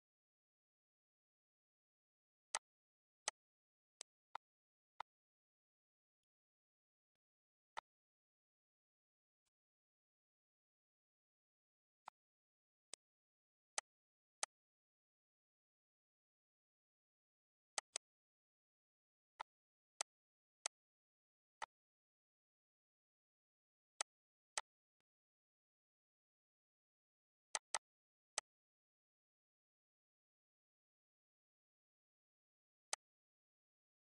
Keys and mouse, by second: 2.8 click, 3.5 click, 4.2 click, 5.2 click, 6.4 click, 7.3 click, 8.0 click, 9.7 click, 12.3 click, 13.2 ctrl+click, 14.0 click, 14.6 ctrl+click, 18.0 click, 19.6 click, 20.2 ctrl+click, 20.9 click, 21.8 click, 24.2 click, 24.8 click, 27.7 click, 28.6 click, 33.1 click.